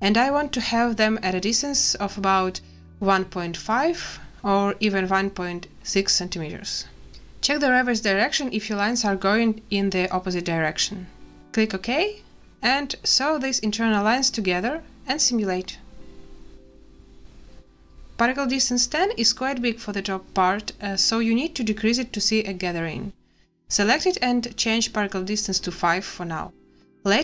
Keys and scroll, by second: 1.8 1, 2.4 ., 3.0 5, 4.7 BackSpace, 5.0 6, 12.6 n, 16.3 space, 24.4 5, 25.5 Return, 26.9 space.